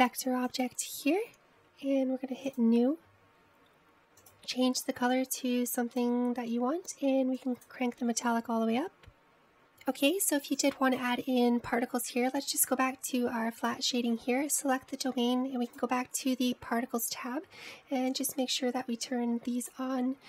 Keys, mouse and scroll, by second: 0.8 click, 1.6 click, 3.5-5.5 drag, 8.5-9.5 drag, 11.7 click, 14.0 drag, 14.7 click, 16.8 click, 19.7-20.2 drag.